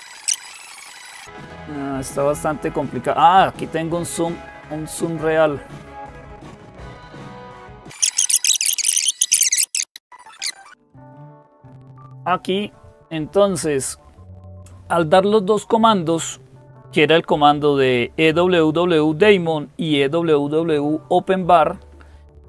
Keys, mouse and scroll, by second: 0.1-22.4 drag.